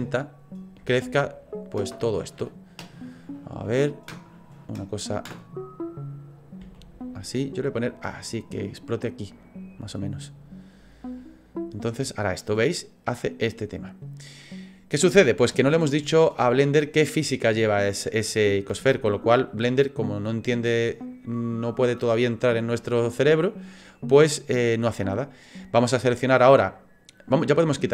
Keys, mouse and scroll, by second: 5.4 middle click, 5.8 middle click, 6.6 s, 7.8 click, 15.5 space, 18.7 space, 19.8 click, 24.1 click.